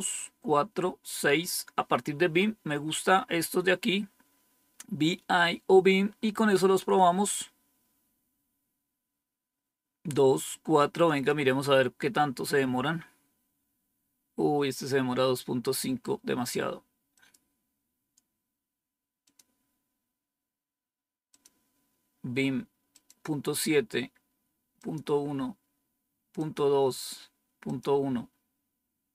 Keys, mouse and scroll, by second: 11.0 click, 17.0 click, 19.1 click, 19.5 click, 21.2 click, 22.8 click, 24.7 click, 25.3 click, 26.3 click, 27.5 click.